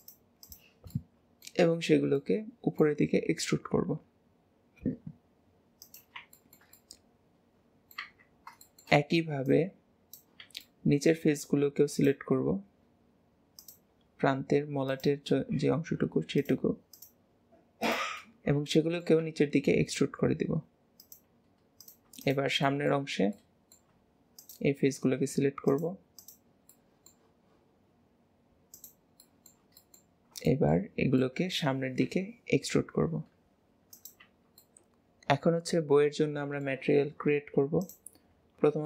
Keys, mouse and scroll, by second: 0.4 shift+click, 0.9-3.0 middle drag, 3.0 e, 6.3-8.0 shift+middle drag, 8.0 Tab, 8.4 scroll down 1, 8.6 shift+middle click, 9.4 click, 10.6-11.9 middle drag, 11.9 click, 12.4-13.5 scroll up 2, 13.6 shift+click, 14.9 shift+click, 15.4 scroll up 3, 16.3 shift+click, 16.9 shift+click, 17.8 shift+click, 18.2 scroll down 3, 18.7 middle click, 19.2 e, 21.8 click, 22.2 shift+click, 22.7-24.3 shift+middle drag, 24.3 shift+click, 25.7 shift+click, 26.1 shift+click, 26.7-28.7 shift+middle drag, 28.7 shift+click, 29.1-30.1 shift+middle drag, 30.1 scroll down 1, 30.2 scroll up 1, 30.5 shift+middle click, 30.9 scroll down 1, 31.2 middle click, 32.0 e, 34.6-35.7 middle drag, 35.7-37.8 middle drag, 37.8-38.8 drag.